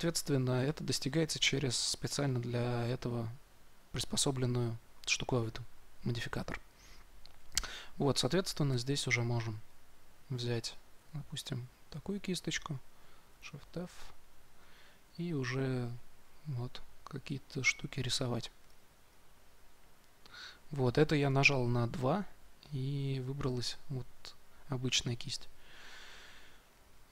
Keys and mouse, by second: 8.6 2, 9.6-12.0 drag, 10.9 f, 13.2 shift+f, 14.5-27.1 drag.